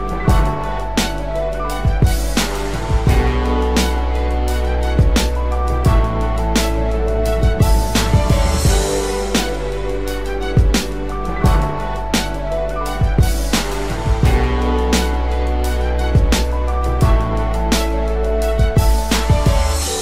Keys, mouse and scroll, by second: 5.0 right click.